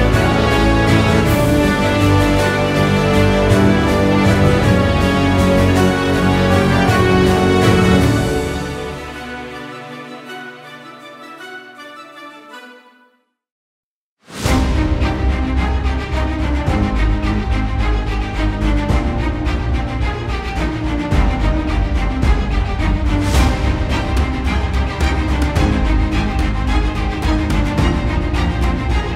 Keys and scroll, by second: 18.9 ctrl+t.